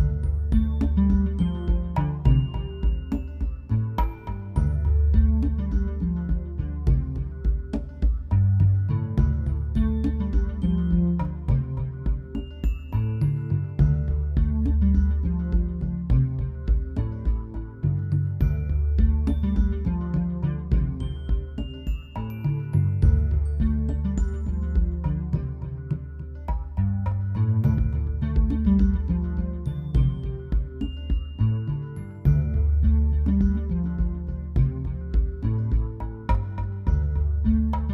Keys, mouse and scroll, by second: 4.9-5.2 click, 8.5-10.5 drag, 13.4 click, 17.6 ctrl+z, 21.2 ctrl+y, 21.9 click, 27.1-28.3 drag, 30.8 ctrl+click.